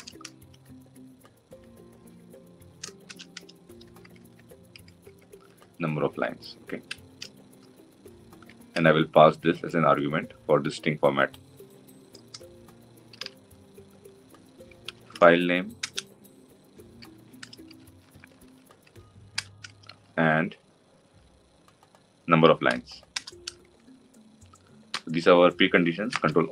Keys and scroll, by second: 15.6 Return, 23.0 Return.